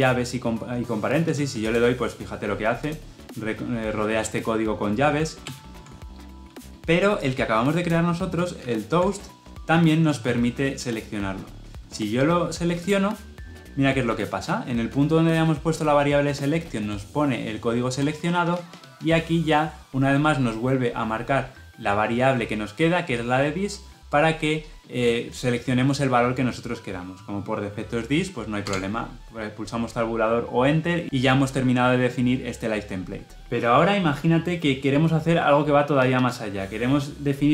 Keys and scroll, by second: 5.3 ctrl+z, 8.5 ctrl+alt+j.